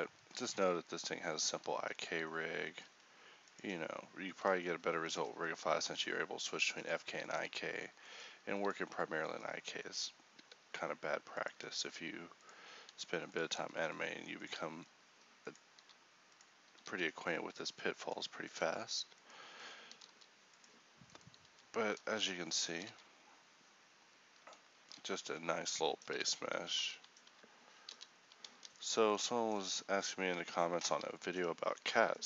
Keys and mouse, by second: 0.6 g, 2.9 g, 4.7 r, 5.3 g, 6.5 r, 7.0 g, 7.5 r, 8.3 g, 10.5 r, 11.6 g, 13.0 r, 13.7 r, 14.8 g, 15.9 r, 17.7 g, 20.0-22.8 drag, 20.0 r, 21.5 g, 22.8 r, 24.9 a, 25.1 a, 26.2 alt+g, 26.8 alt+t, 28.0 alt+r, 28.6 a, 30.5 ctrl+t, 31.0 a.